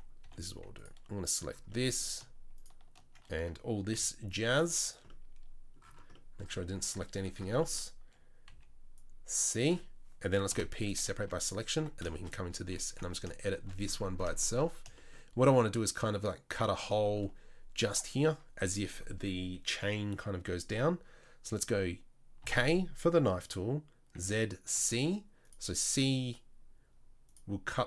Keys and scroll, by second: 0.3 3, 3.9 c, 8.5 c, 10.5 p, 11.2 Tab, 11.8 Tab, 12.9 KP_7, 22.4 k.